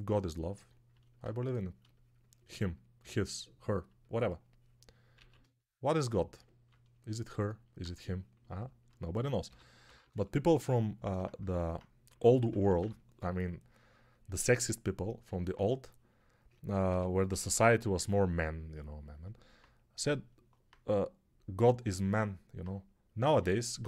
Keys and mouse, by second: 5.0 ctrl+z, 9.3 g, 9.7 ], 9.9 ], 10.0 ], 12.0 3, 12.4 [, 12.5 [, 12.6 [, 16.8 g, 17.2 ], 17.3 ], 17.4 ].